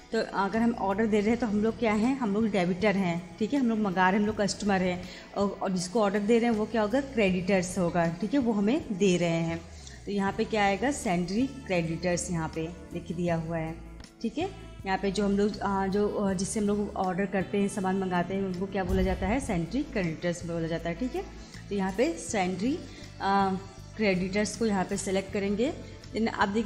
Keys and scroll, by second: 10.0 Down, 24.8 Return.